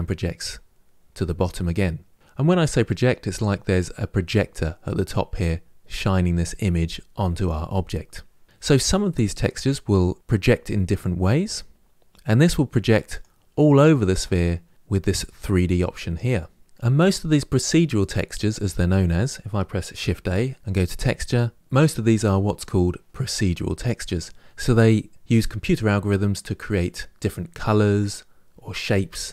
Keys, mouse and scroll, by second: 2.1-2.5 scroll down 2, 4.4-6.9 scroll down 1, 6.9-8.2 scroll down 1, 8.4-13.0 drag.